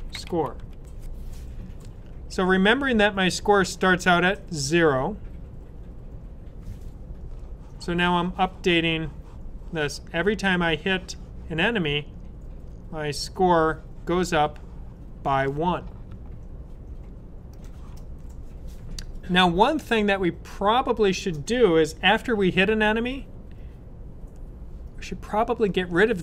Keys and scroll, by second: 0.0-0.9 typing.